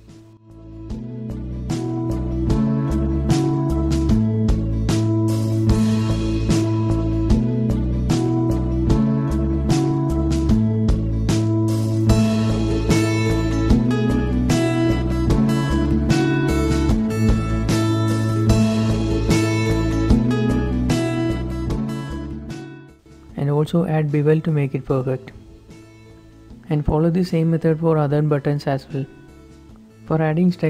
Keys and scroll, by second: 0.0-1.7 typing, 1.0 Return, 1.3 Escape, 2.4 Return, 3.2 ctrl+r, 4.0 Escape, 4.2-5.0 typing, 4.7 Tab, 5.5 Tab, 5.8 Tab, 6.1-6.7 typing, 7.2 Tab, 7.6 Tab, 8.6 2, 8.9 x, 9.2 ctrl+s, 9.4 ctrl+r, 9.9 Escape, 10.1 ctrl+r, 11.0 Escape, 11.2 ctrl+r, 11.6 Escape, 11.8 ctrl+r, 11.9 Escape, 12.1 ctrl+r, 13.1 ctrl+r, 13.1 Escape, 13.1 z, 14.2 ctrl+r, 14.8 Escape, 15.5 x, 15.9 ctrl+r, 16.2 Escape, 16.7-17.5 typing, 16.8 ctrl+s, 18.7 ctrl+s, 19.3 alt+shift+Tab, 19.5 z, 20.3 Tab, 27.3-28.0 typing, 30.3 z.